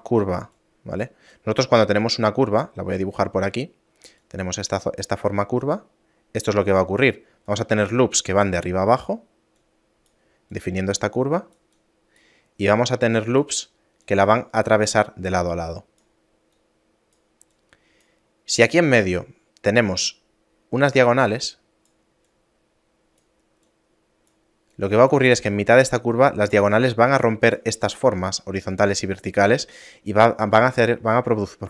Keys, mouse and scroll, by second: 0.0-1.4 typing, 0.6 click, 1.4 right click, 3.6-5.7 typing, 4.3 click, 5.7 click, 6.8-10.6 typing, 7.6 click, 8.7 click, 9.6 click, 10.6 click, 11.6-31.6 typing, 11.8 click, 12.8 click, 14.1 click, 15.4 click, 16.6 click, 17.6 click, 21.5 click, 22.4 click, 23.7 click, 24.8 click, 27.3 click, 28.1 click.